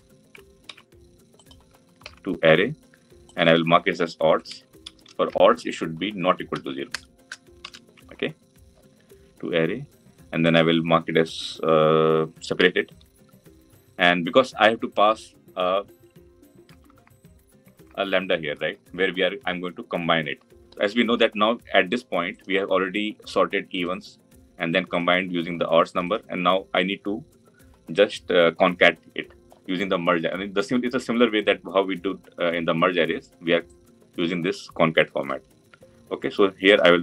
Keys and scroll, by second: 0.5 ctrl+c, 1.8 ctrl+v.